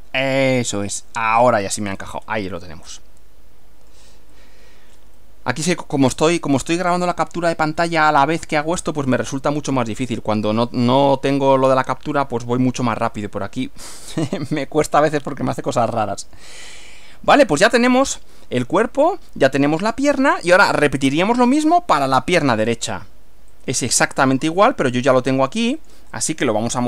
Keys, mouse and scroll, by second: 0.3 click, 1.5-2.2 scroll down 1, 2.7-4.1 middle drag, 4.3-6.0 middle drag, 8.1-9.3 middle drag, 9.8-10.9 middle drag, 13.2 scroll up 2, 14.1-15.2 middle drag, 15.8 shift+middle click, 17.0-18.1 middle drag, 23.5-25.1 drag, 25.8 click, 26.3 right click.